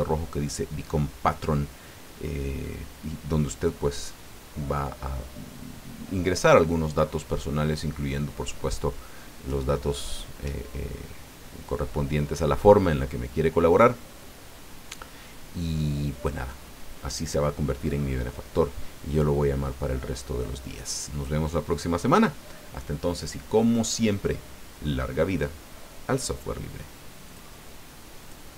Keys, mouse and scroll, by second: 27.3 click, 28.2 click.